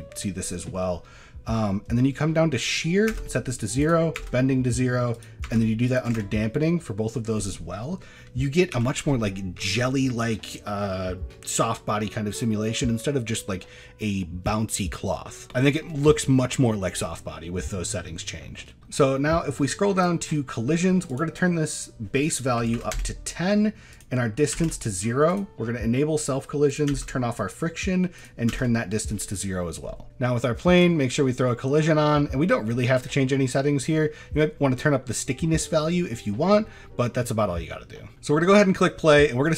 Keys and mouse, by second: 2.7 click, 3.8 click, 5.1 click, 6.0 click, 8.7 n, 18.6 middle click, 20.0 click, 21.2-23.0 drag, 24.1 click, 25.3 click, 26.7 click, 28.2 click, 32.1 middle click, 32.7 shift+middle drag, 33.3 middle drag, 33.9 shift+middle drag, 36.9 middle click, 37.3 shift+middle click, 38.8 middle drag.